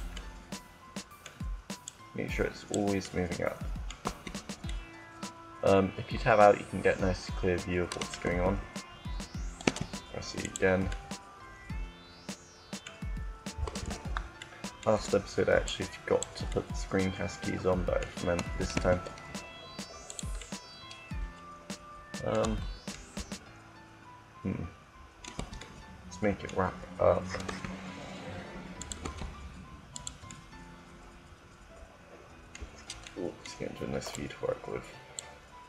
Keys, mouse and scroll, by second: 2.0-3.0 drag, 3.1 middle click, 3.8 Tab, 8.1 Tab, 9.4 e, 14.2-15.2 middle drag, 15.2-17.3 drag, 18.6 e, 20.0-21.8 drag, 22.3 Tab, 25.3 Tab, 27.4 e, 28.9 e, 30.0-31.0 middle drag, 30.9 click, 31.0 click, 33.8 click, 34.6-35.6 drag.